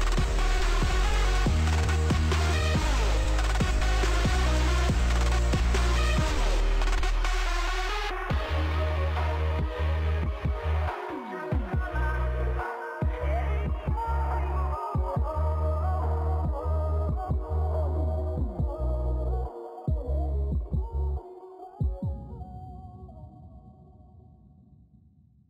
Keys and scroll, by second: 3.3 ctrl+space, 19.9 ctrl+s.